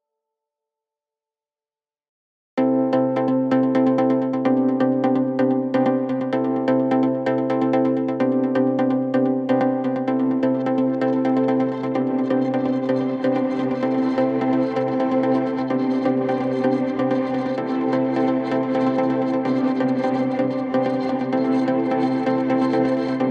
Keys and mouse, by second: 1.5-6.8 drag, 5.4 s, 6.8 middle click, 7.6-10.1 shift+drag, 9.3 s, 10.1 middle click, 10.5-17.3 drag, 16.7 s, 17.3 middle click, 17.6-23.3 drag.